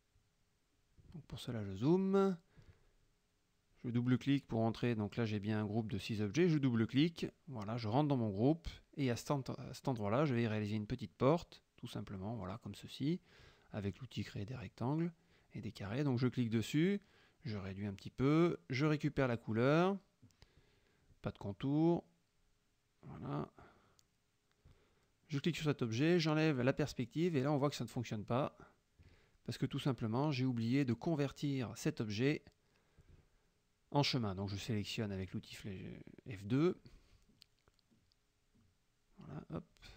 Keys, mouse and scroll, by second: 1.0-2.7 middle drag, 2.7 click, 3.1-7.8 middle drag, 7.8 click, 8.4 click, 10.1 click, 11.2-13.6 drag, 13.9 click, 15.0 click, 16.3 F2, 16.6 click, 17.3 F1, 17.4 click, 18.7 F7, 19.5 click, 20.6 F1, 21.5 shift+click, 22.6 F2, 22.9 click, 23.6 F1, 23.9 click, 24.4 click, 25.3 click, 27.4 click, 29.3 click, 30.1 click, 34.6 F2, 34.8 click, 37.6 F1, 37.8 click, 38.6 click, 39.8 click.